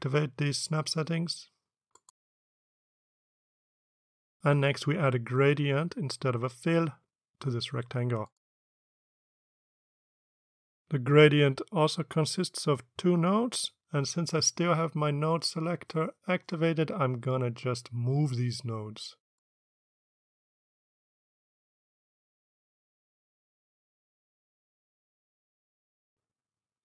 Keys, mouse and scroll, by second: 1.7 click, 2.4 click, 2.8 click, 3.1 click, 4.0-4.7 drag, 9.0 click, 19.3-21.0 drag, 23.0-25.6 drag.